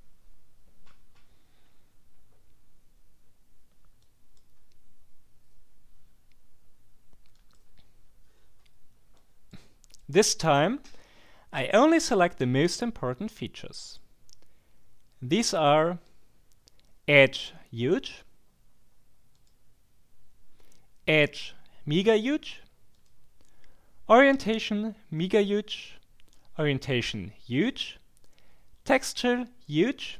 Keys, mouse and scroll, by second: 4.0 click, 7.3 click, 9.1-10.4 drag, 13.8 click, 19.4 click, 22.9 click, 25.7 click, 27.5 click.